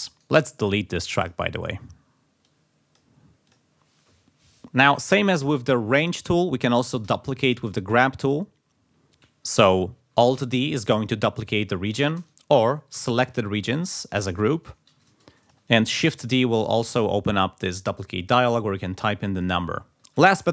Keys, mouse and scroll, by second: 0.1 right click, 1.2 click, 2.4 click, 3.4 click, 7.0 g, 7.6 click, 10.4 alt+d, 11.9 shift+right click, 12.2 shift+click, 12.9 alt+shift+d, 14.9 ctrl+z, 15.2 ctrl+click, 15.9 shift+d, 16.9 click, 17.6 3, 18.4 click, 19.1 ctrl+scroll down 2, 20.0 click.